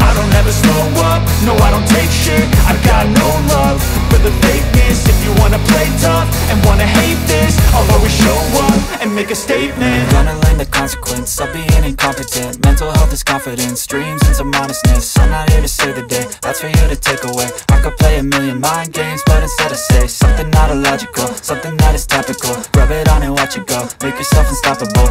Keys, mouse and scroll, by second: 2.1 click, 3.7 space, 4.4-6.2 drag, 6.2 space, 6.3 click, 6.4 space, 7.7-9.9 drag, 9.9 space, 9.9 click, 10.0 space, 10.9-12.1 drag, 12.1 space, 12.3 click, 12.3 space, 13.2-15.2 drag, 15.2 space, 15.9-19.3 drag, 19.3 space, 19.4 click, 19.5 space, 20.3 click, 21.7 ctrl+z, 22.1-23.7 drag, 23.7 space, 24.4-25.1 scroll up 1.